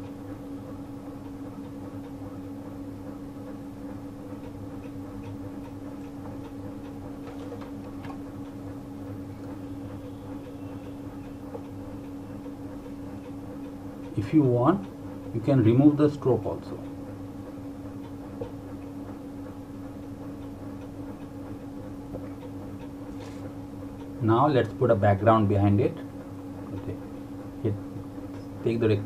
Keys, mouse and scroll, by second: 5.2 click, 9.6 click, 12.3 click, 24.3 click.